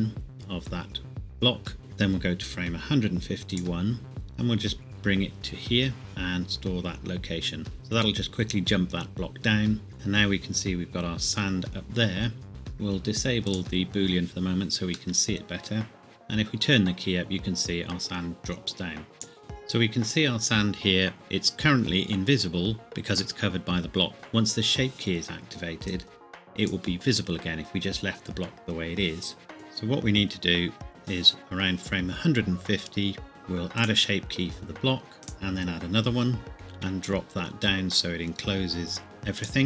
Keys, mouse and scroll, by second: 0.3 click, 3.5 click, 4.9 click, 6.0 i, 7.6 click, 9.9 click, 12.1-12.5 scroll up 1, 13.5 click, 15.2 middle click, 16.0 click, 22.9 middle click, 24.1 click, 29.5 click, 33.8 click, 36.5 g, 36.8 z, 39.4 click, 39.5 click.